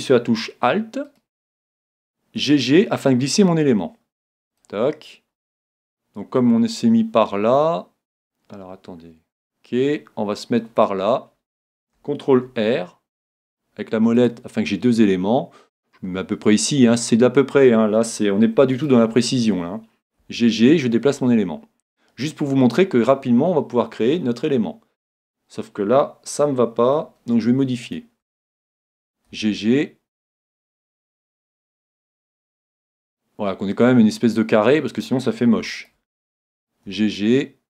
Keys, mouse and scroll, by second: 1.1-3.0 right drag, 2.4 g, 4.6-6.4 drag, 5.4-7.3 middle drag, 12.5 ctrl+r, 17.0-18.9 drag, 18.8-20.5 right drag, 20.2 g, 22.0-23.7 drag, 22.3-24.1 middle drag, 27.9-29.7 right drag, 29.3 g, 33.8-35.6 drag, 35.8-37.6 right drag, 36.9 g.